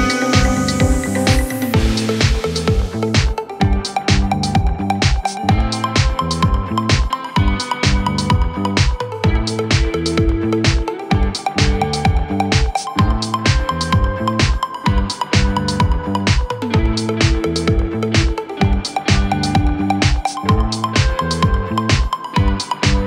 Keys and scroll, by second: 20.1 Escape, 20.2 F3, 20.8 Escape.